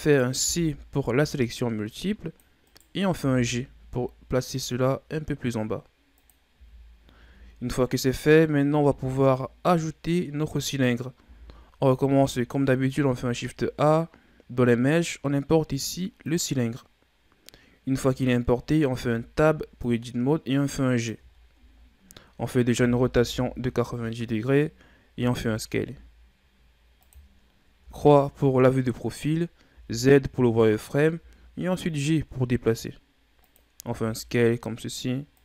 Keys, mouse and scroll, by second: 0.4 c, 3.1 g, 6.5 z, 7.2 Tab, 7.8-8.8 scroll down 3, 8.8 KP_1, 10.3-11.2 scroll down 3, 11.2 a, 11.7-13.0 scroll down 2, 13.0 shift+a, 16.9-17.5 scroll down 3, 17.5-18.4 scroll up 7, 18.9 Tab, 19.8-21.3 drag, 21.3-21.7 shift+scroll down 5, 21.7-22.7 scroll up 7, 22.7 r, 25.1 s, 27.8 KP_3, 29.7 z, 31.1 g, 33.8 s.